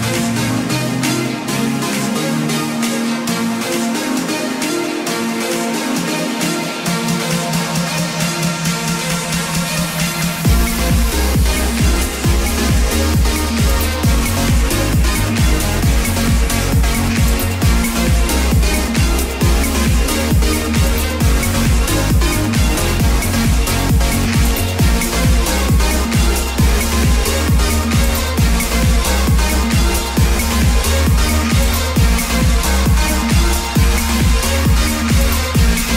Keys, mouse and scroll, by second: 0.8-13.2 drag, 31.0 Return, 31.7-33.1 typing, 34.4 Return.